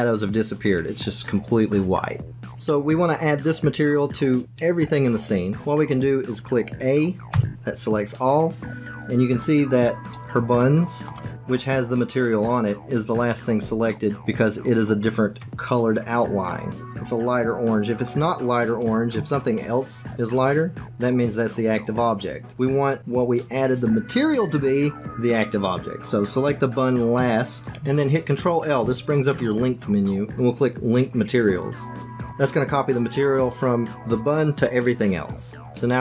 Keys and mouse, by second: 7.3 a, 10.6 shift+click, 19.6 shift+click, 29.2 ctrl+l.